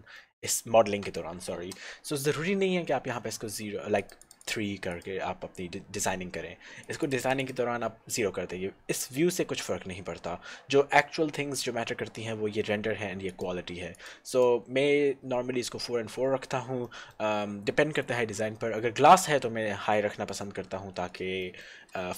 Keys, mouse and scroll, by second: 0.3 shift+middle click, 0.6 middle click, 1.4 shift+middle click, 4.0 click, 4.3 click, 7.5 click, 13.4 click, 17.1 middle click.